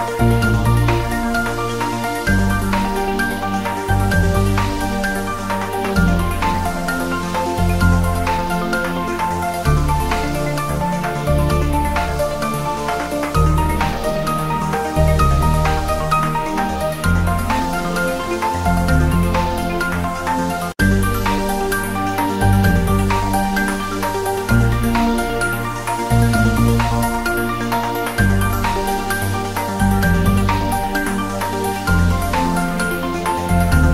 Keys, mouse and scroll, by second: 0.7 click, 1.4-2.3 scroll down 1, 2.3 click, 2.4-2.7 scroll down 1, 3.3 click, 5.0 click, 6.7-7.5 scroll up 1, 7.5 click, 8.2 Return, 8.5 ctrl+s, 10.6-10.9 scroll up 1, 12.2 click, 13.3 scroll down 1, 13.7 scroll up 1, 13.8 scroll down 1, 14.4-16.6 scroll down 1, 17.3 scroll up 1, 17.5 scroll down 1, 17.6 scroll up 1, 17.9-18.2 scroll down 2, 18.3 scroll up 1, 18.3 scroll down 1, 19.2 scroll down 1, 19.7 scroll up 1, 20.8 scroll down 1.